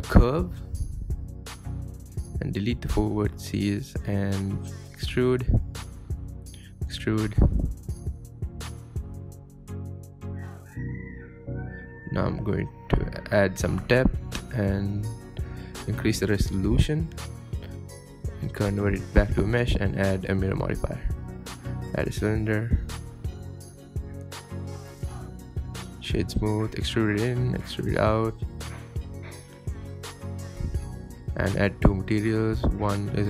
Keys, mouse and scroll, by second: 0.4 click, 0.7 click, 2.2 g, 2.7 KP_7, 3.0-3.3 scroll up 3, 3.1 shift+middle click, 3.3 Tab, 3.5 click, 3.7 click, 4.1 x, 4.2 Tab, 4.6 Tab, 4.8 click, 4.9 shift+middle click, 5.2-7.7 typing, 7.3 scroll down 1, 7.3 shift+middle click, 7.4 scroll up 2, 7.5 shift+middle click, 9.1 click, 9.2 g, 10.1 click, 10.4 click, 10.5 click, 10.7 g, 11.3 click, 11.4 click, 11.6 g, 11.8 Tab, 12.1 scroll down 1, 12.2 scroll up 1, 13.6-15.5 drag, 17.4 Tab, 17.6 Tab, 18.4 click, 18.5-18.8 scroll down 3, 18.6 middle drag, 18.8-19.3 middle drag, 19.3 scroll up 1, 19.5 click, 19.6-20.5 middle drag, 20.5-25.2 typing, 21.8 middle click, 22.0 scroll up 1, 22.5 scroll up 1, 22.6 shift+middle click, 23.0 Tab, 23.1 shift+middle click, 23.5 Tab, 23.9-24.5 scroll up 2, 25.5 Tab, 25.6 scroll up 2, 25.7 shift+middle click, 25.8 Tab, 25.9 middle click, 26.1 right click, 26.3 Tab, 26.4 click, 26.6-29.0 typing, 27.1-27.5 scroll up 2, 27.2 shift+middle click, 28.0 scroll down 2, 28.1 middle click, 28.3 scroll up 1, 29.5-30.5 scroll down 9, 29.8 middle click, 30.1 g, 30.5-31.5 scroll up 9, 30.7 g, 31.1 Tab, 31.4 Tab, 31.6 middle click, 31.9 scroll up 2, 32.1 shift+middle click, 32.7 alt+click, 32.9 2, 33.0 alt+click, 33.1 scroll down 3, 33.2 middle click.